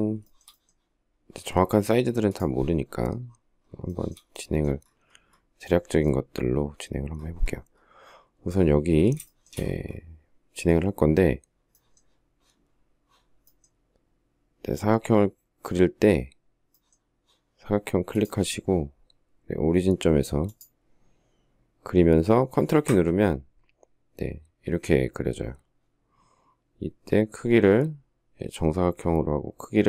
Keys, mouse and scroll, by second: 0.1 shift+middle click, 3.7 shift+middle click, 9.0 shift+middle click.